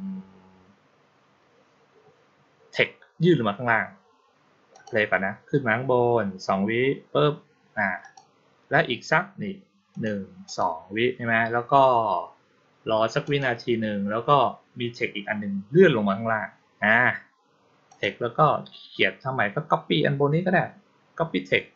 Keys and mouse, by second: 4.6 click, 7.9 click, 9.8 click, 10.3 click, 13.1 click, 17.7 click.